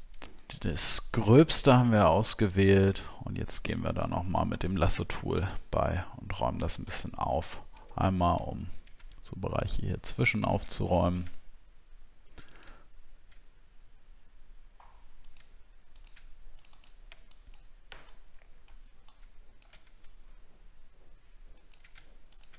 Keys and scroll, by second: 6.9 alt+scroll up 1, 8.4 alt+scroll up 1.